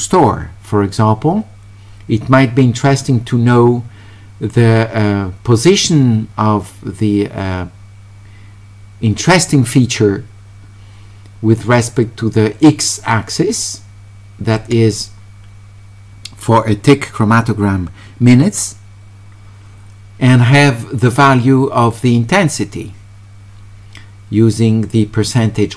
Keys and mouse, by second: 13.5-14.6 drag, 25.4-25.7 drag.